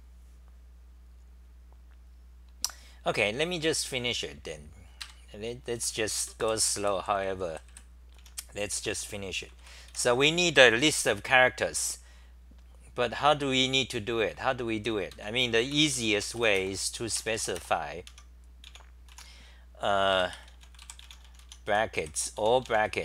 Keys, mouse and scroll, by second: 5.0 ctrl+g, 5.0 ;, 5.7 g, 6.2 d, 8.1-10.4 typing, 15.1 ctrl+g, 15.5 Return, 15.7 Return, 17.1 u, 17.1 BackSpace, 18.1 Home, 18.6 e, 19.1 u, 21.4-23.0 typing.